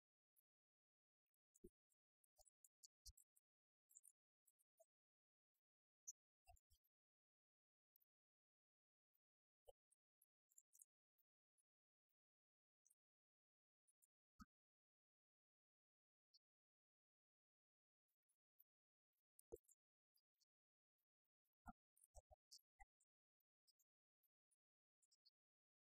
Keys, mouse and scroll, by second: 4.6-10.9 drag, 14.1-14.9 middle drag, 15.8-17.8 middle drag, 18.5-19.4 middle drag, 21.1-22.9 drag, 24.0-25.9 drag.